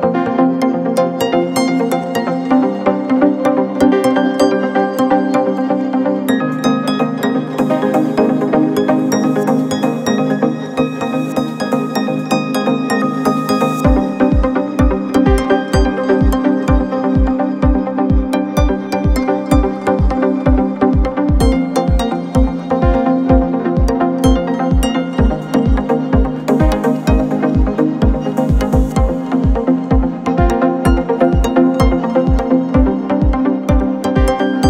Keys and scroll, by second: 5.1 alt+Tab, 8.6 ctrl+c, 10.6 ctrl+c, 13.0 t, 15.4 ctrl+v, 17.2 ctrl+a, 24.4 ctrl+a, 27.2-27.8 typing.